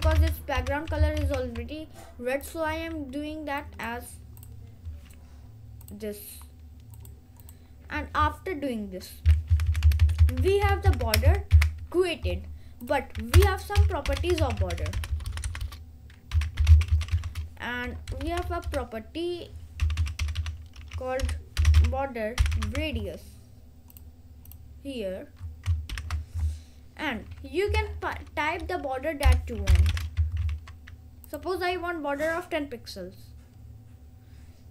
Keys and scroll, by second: 0.0-1.1 typing, 1.3 ctrl+s, 9.6 Left, 13.4 Return, 13.9-17.7 typing, 18.7-23.3 typing, 26.0 shift+;, 27.8 1, 29.1-30.5 typing.